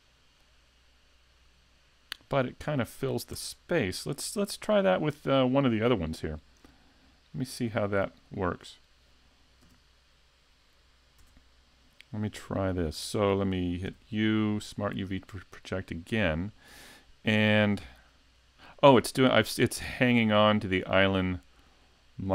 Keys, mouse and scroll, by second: 0.6 scroll, 3.4 Tab, 7.8 Left, 8.6 Right, 11.2 Tab, 13.9 u.